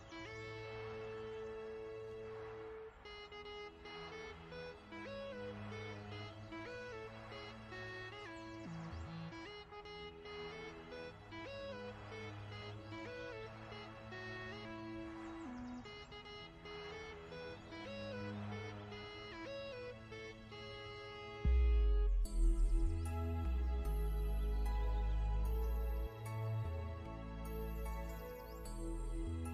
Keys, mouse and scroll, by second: 5.1 click, 11.8 click, 15.4 n, 16.0 click, 17.6 v, 18.4 click, 20.4 z, 20.5 click, 21.2 ctrl+shift+z, 21.4 click, 21.8 ctrl+scroll down 1, 23.6 n, 24.4 click, 25.9 v, 27.3 click, 27.6 v, 27.7 click.